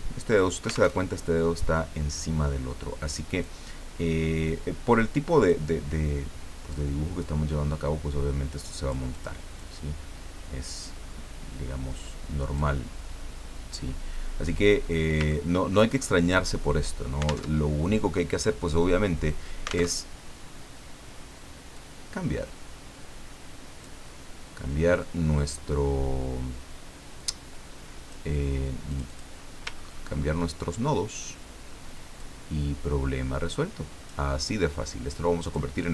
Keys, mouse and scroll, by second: 0.9 alt+Tab, 3.4-5.6 drag, 6.7-9.1 drag, 9.1 middle click, 9.1 click, 9.6-12.9 drag, 14.5 scroll up 2, 14.8 scroll down 2, 15.3 ctrl+scroll up 2, 16.1 ctrl+click, 17.5 alt+Tab, 19.9 alt+Tab, 21.7-24.0 drag, 25.0-28.3 drag, 28.9 click, 29.7-30.4 ctrl+scroll up 2, 32.2-34.5 drag, 35.4 click.